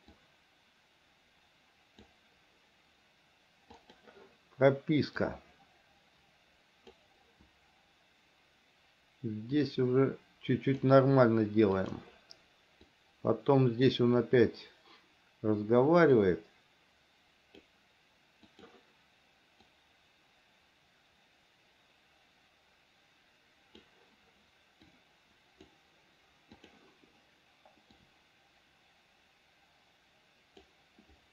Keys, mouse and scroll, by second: 0.4-2.3 drag, 4.0 click, 5.5-7.2 drag, 9.7-11.1 drag, 12.1 click, 13.2 click, 16.4-17.9 drag, 18.8 click, 19.9-24.1 drag, 25.2 click, 26.8 click, 28.3-30.9 drag.